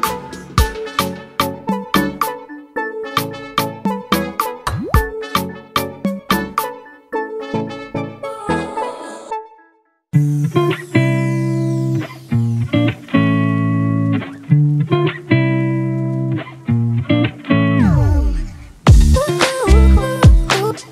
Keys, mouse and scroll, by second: 1.6-3.4 drag, 4.0-5.9 drag, 6.1-13.0 drag, 13.0-14.0 scroll up 2, 14.0-20.9 drag.